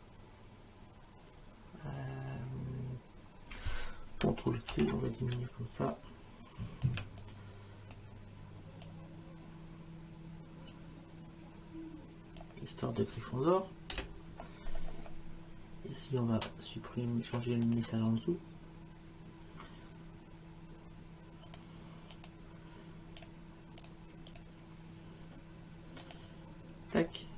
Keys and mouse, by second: 4.7 ctrl+t, 6.0 click, 7.2 click, 8.9 click, 13.9 Return, 13.9 KP_Enter, 17.7 click, 21.5 click, 23.2 click, 26.0 click.